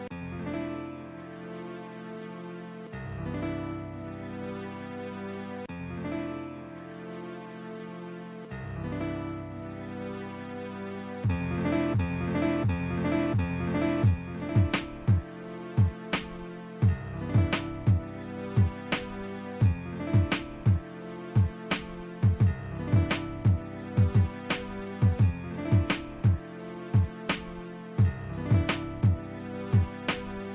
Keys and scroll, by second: 8.4 scroll down 1, 8.5 scroll up 1, 10.3 ctrl+z, 12.0 scroll down 1, 12.1 scroll up 1, 15.9 scroll down 1, 16.1 scroll up 1, 17.4 scroll down 1, 17.5 scroll up 1, 20.2 scroll down 1, 20.3-20.6 scroll up 1, 30.0 scroll down 1.